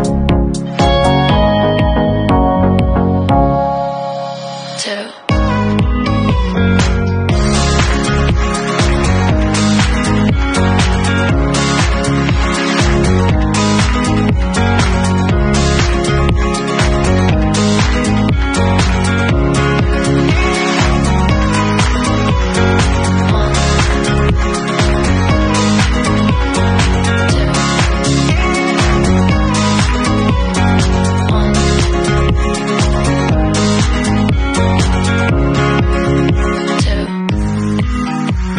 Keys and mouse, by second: 9.0-11.1 middle drag, 9.7 shift+z, 11.1 click, 11.5-15.6 middle drag, 12.1 ctrl+e, 15.6-21.3 alt+drag, 16.3 shift+z, 17.1 w, 21.3-29.2 shift+middle drag, 23.6 shift+z, 24.3 ctrl+s, 29.2-30.0 drag, 30.0-38.5 middle drag, 30.6 Tab.